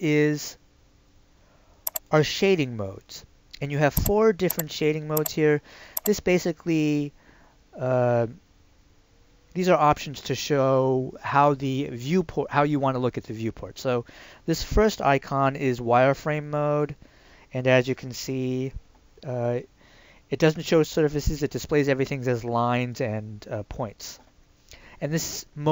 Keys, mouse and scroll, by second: 1.9 click.